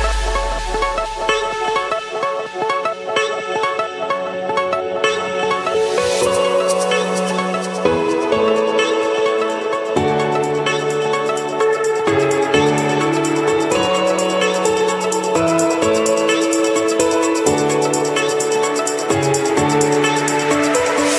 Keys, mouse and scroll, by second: 0.3 0, 0.9 Return, 3.1 click, 6.7 7, 10.4-12.3 typing, 12.8 Return, 13.9 Escape, 14.8 scroll, 14.9 middle click, 15.7 click, 16.2 click, 17.8 click, 18.8 click.